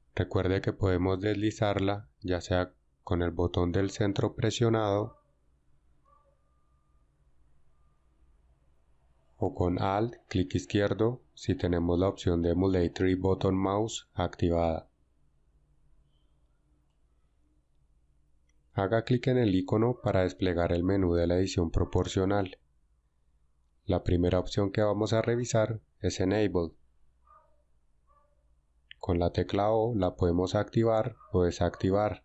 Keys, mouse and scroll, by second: 3.7-8.1 middle drag, 14.7-17.2 drag.